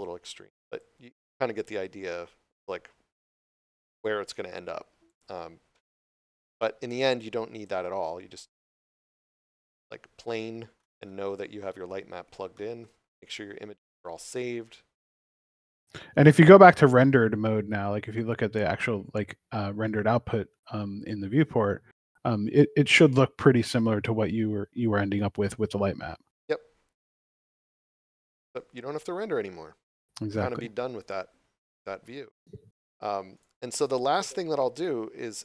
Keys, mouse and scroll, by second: 0.7 click, 5.0 click, 5.7 x, 6.9 click, 9.3 scroll down 1, 9.7 middle click, 11.0 scroll up 1, 12.5 shift+middle click, 12.9 scroll down 1, 15.1 click, 17.4 scroll up 1, 19.3 click, 31.0 click, 33.3 right click.